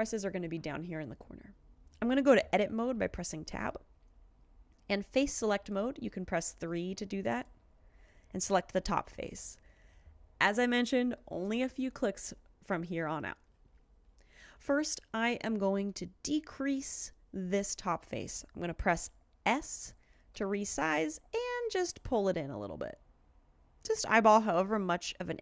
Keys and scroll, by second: 2.9 Tab, 20.4 s.